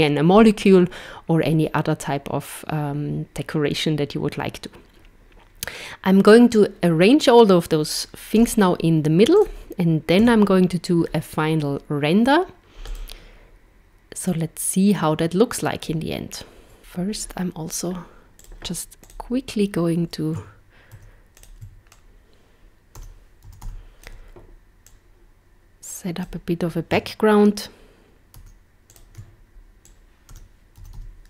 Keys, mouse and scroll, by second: 8.4 z, 10.3 a, 12.9 click, 14.3 click, 16.8 click, 16.8 z, 18.4 click, 19.0 click, 21.0 shift+d, 22.0 click, 24.9 click, 28.4 shift+d, 29.8 click.